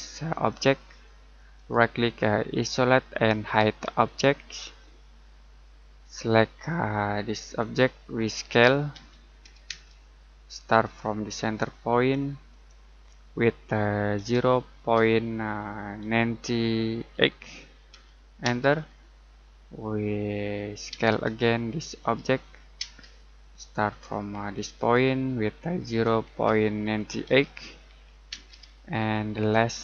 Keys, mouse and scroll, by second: 0.3 click, 2.5 click, 4.8 middle click, 5.5-6.0 scroll up 1, 6.0 middle click, 7.6 click, 8.6-9.7 typing, 12.5 click, 14.1 0, 15.7-17.1 typing, 18.4 space, 20.9 space, 22.0 click, 24.7 click, 25.8-28.3 typing, 29.3 scroll down 1, 29.7 middle click.